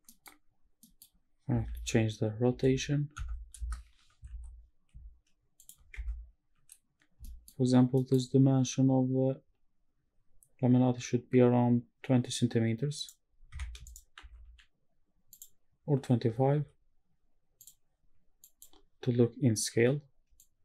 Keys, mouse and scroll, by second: 0.1 middle click, 0.3-0.6 scroll up 2, 0.8 middle click, 0.8 scroll down 1, 1.7-4.3 typing, 3.1 KP_Subtract, 3.7 KP_Enter, 5.6 shift+click, 6.0 Tab, 7.2 shift+middle drag, 8.0 middle click, 13.0 right click, 13.8 shift+right click, 14.2 shift+a, 16.6 n, 17.6 click, 18.4 click, 20.3 click.